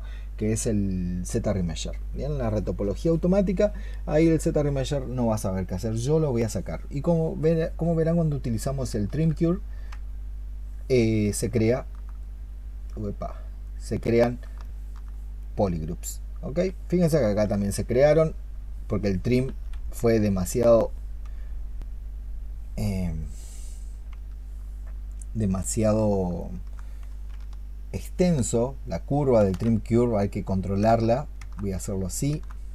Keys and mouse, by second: 9.2 ctrl+click, 11.5 alt+click, 14.3 alt+click, 14.5 alt+click, 19.9 ctrl+z, 20.4 ctrl+z, 24.0 ctrl+z, 26.3 alt+click, 27.9 ctrl+shift+click, 29.1 ctrl+shift+click.